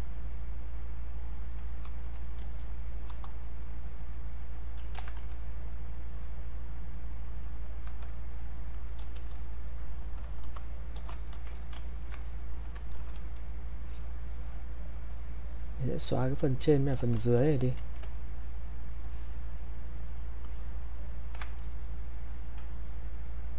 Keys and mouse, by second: 2.4-3.1 typing, 3.9 click, 5.0 ctrl+z, 5.8-8.7 alt+drag, 9.0 q, 9.4 click, 10.4 shift+f, 11.2 click, 11.6 alt+shift+click, 11.9 ctrl+right click, 12.2 ctrl+click, 13.0 shift+f, 13.8-17.0 shift+drag, 17.0-23.5 shift+drag.